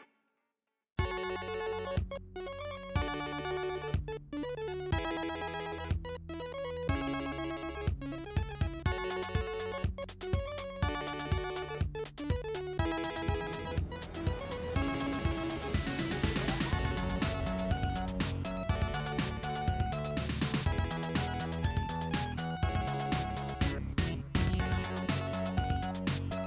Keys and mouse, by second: 1.9 Tab, 2.3 Tab, 2.5-3.3 middle drag, 3.3 click, 3.4 shift+middle click, 3.6 shift+click, 3.7-7.0 shift+middle drag, 6.0 g, 7.0-12.9 drag, 9.8 g, 12.9-21.0 middle drag, 16.2 s, 23.5 alt+drag, 25.4 drag, 25.6 e.